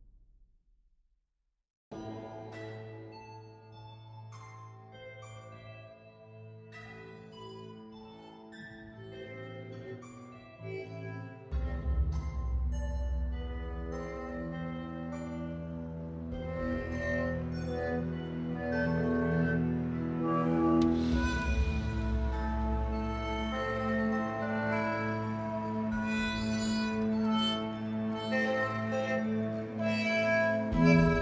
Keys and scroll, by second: 15.4 typing.